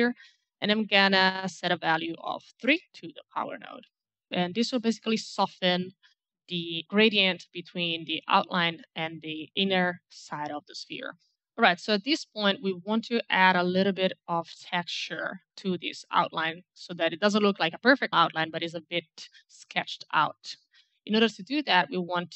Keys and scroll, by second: 2.5 KP_3, 2.6 Return.